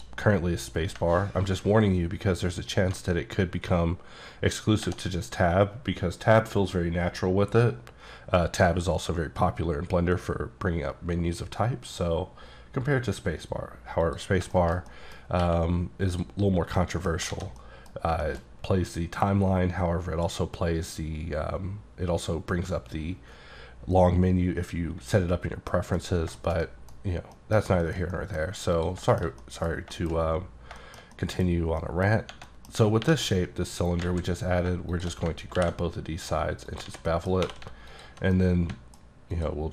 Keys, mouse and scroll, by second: 1.6-2.2 scroll down 4, 4.9 Tab, 14.1 click, 14.5 middle click, 14.7 scroll down 1, 14.9 middle click, 15.3 scroll up 1, 15.4 q, 16.1 click, 16.8 middle click, 17.1 scroll down 1, 17.3 alt+a, 17.6 middle click, 18.2 shift+middle click, 25.7 middle click, 26.0-26.4 scroll down 3, 26.4 shift+middle click, 27.0-27.3 scroll up 2, 27.3 middle click, 27.6 scroll down 2, 27.8 shift+middle click, 28.8 click, 29.1 shift+middle click, 29.9 shift+middle click, 30.3-30.7 scroll up 2, 30.8 shift+middle click, 31.8 middle click, 32.5 middle click, 32.8 scroll up 1, 33.0 3, 33.3 click, 34.0 alt+z, 34.9 shift+click, 35.6 ctrl+b, 36.3-36.7 scroll down 6, 36.7 click, 36.9 alt+z, 37.1 middle click, 37.4 scroll up 1, 37.4 2, 37.9 alt+click, 38.3-38.7 alt+scroll up 1, 38.7 middle click, 39.3 alt+click.